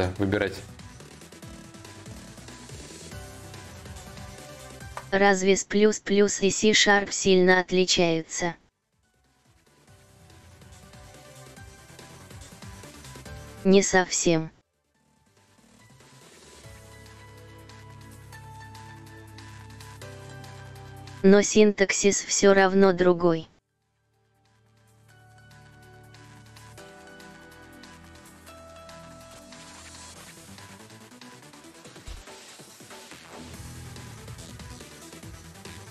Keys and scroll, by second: 0.7 4, 3.3 4, 28.4 shift+e, 29.2 e, 30.4-31.6 typing, 32.4 Return, 35.5 Escape.